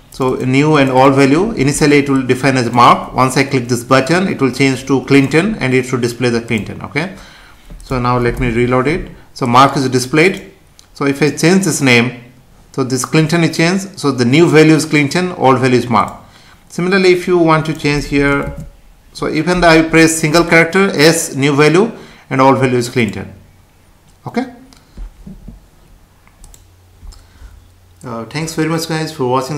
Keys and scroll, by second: 8.4 F5.